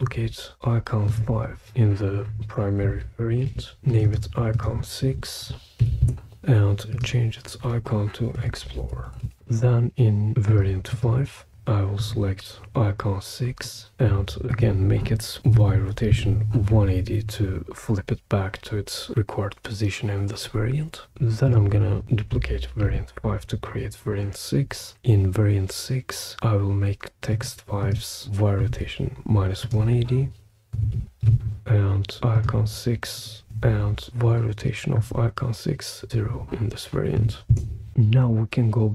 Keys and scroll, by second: 3.4 super+d, 5.4-5.8 typing, 6.0 Return, 8.1-9.7 typing, 15.0-16.0 typing, 16.1 Return, 22.8 super+d, 30.6-31.8 typing, 37.1 0, 37.5 Return.